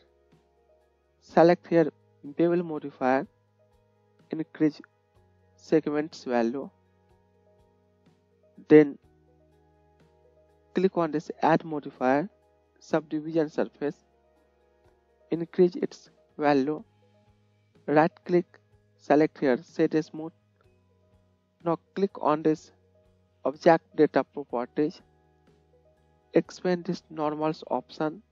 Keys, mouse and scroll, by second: 24.6-27.4 right drag, 27.4-28.3 middle drag.